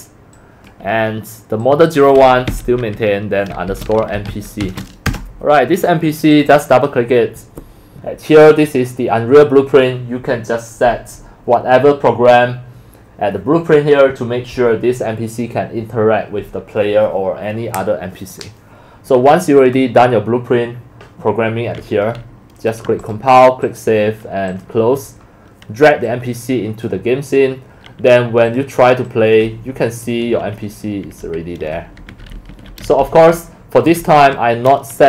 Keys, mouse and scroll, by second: 2.5-5.1 typing, 5.9-6.3 drag, 11.4 drag, 22.3 click, 23.0 click, 23.6 click, 24.5 click, 25.1 click, 26.0 click, 27.6 drag, 28.5 click, 29.2-33.6 typing, 29.3 click, 34.2 Escape.